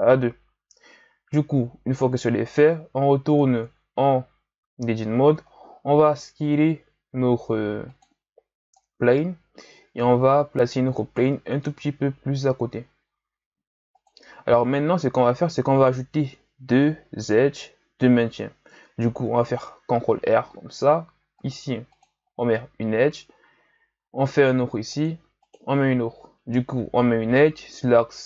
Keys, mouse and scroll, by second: 3.3 Tab, 5.0-5.5 scroll down 1, 5.5-6.0 ctrl+scroll up 1, 6.0 s, 8.7-11.6 drag, 11.6 s, 20.0 ctrl+r, 23.9 ctrl+r.